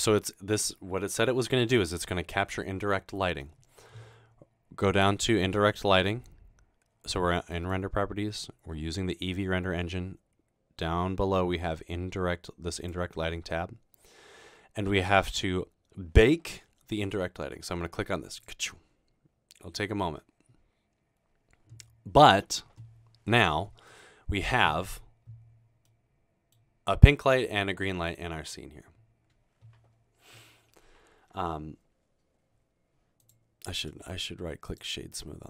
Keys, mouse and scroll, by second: 7.6 click, 12.8 click, 13.9-14.9 scroll down 2, 18.4 click, 23.9-24.4 middle drag, 24.5 scroll down 2.